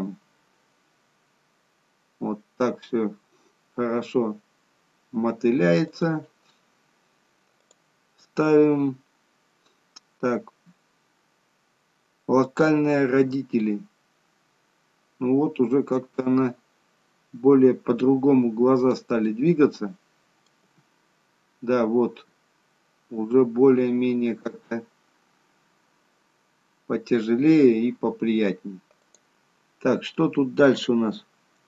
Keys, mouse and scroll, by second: 7.6 click, 13.3 g, 19.2 middle click, 20.6 g, 30.0-30.9 scroll down 3.